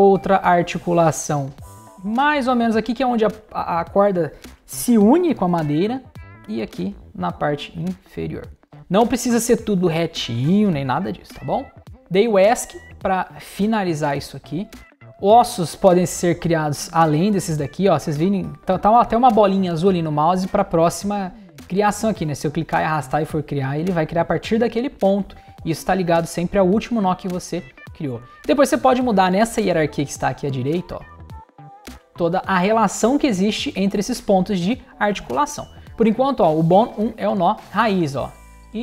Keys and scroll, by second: 11.5 Escape, 22.9 Escape.